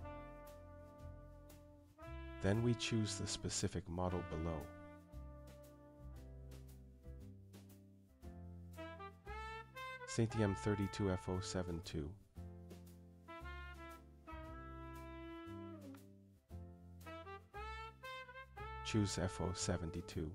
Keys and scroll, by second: 9.0 Down, 9.7 Return, 17.9 Down.